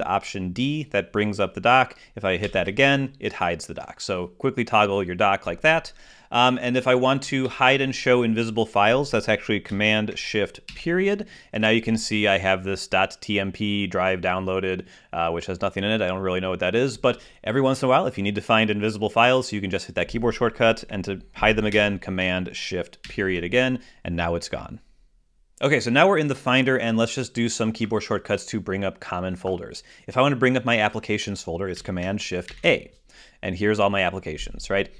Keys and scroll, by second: 3.3 alt+super+d, 8.3 super+h, 11.5 shift+super+., 23.9 shift+super+., 32.8 shift+super+a.